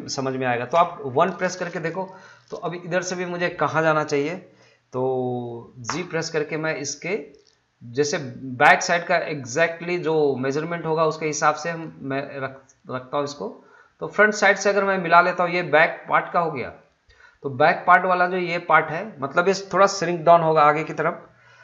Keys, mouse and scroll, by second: 2.3-5.5 drag, 5.9 g, 14.0 click, 17.9-21.0 drag.